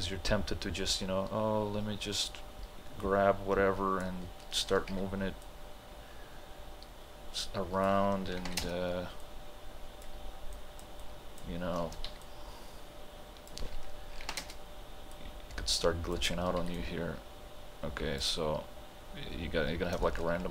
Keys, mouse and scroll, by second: 2.2-5.0 drag, 5.0 t, 5.5-8.4 drag, 8.4 ctrl+h, 8.6 space, 9.2-12.1 drag, 12.1 t, 12.2-14.3 drag, 14.3 ctrl+h, 14.4 space, 15.2-16.6 drag, 16.6 t, 16.8-20.5 drag.